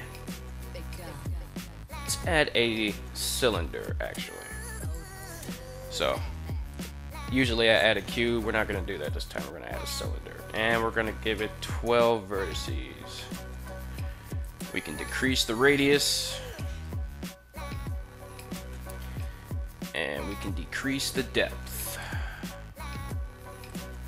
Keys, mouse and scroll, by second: 6.6 click, 7.3-12.4 drag, 14.2-18.2 shift+drag, 19.7-21.8 shift+drag, 23.5-24.0 shift+drag.